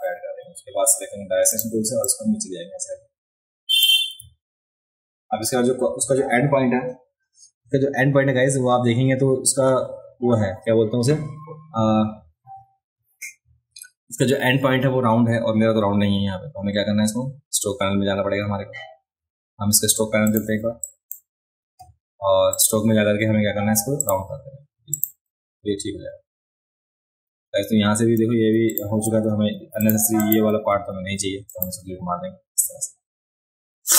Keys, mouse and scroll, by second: 0.4 a, 1.6 click, 2.1-3.8 drag, 4.3 alt+scroll down 2, 4.5 alt+scroll up 2, 16.4-16.8 alt+scroll up 2, 20.3 click, 20.9 drag, 22.5 click, 24.0 click, 24.9 click, 25.7-26.7 scroll down 4, 27.6-28.2 alt+scroll up 2, 28.7 click, 29.9 click, 30.2 click, 30.7 a, 31.5 click.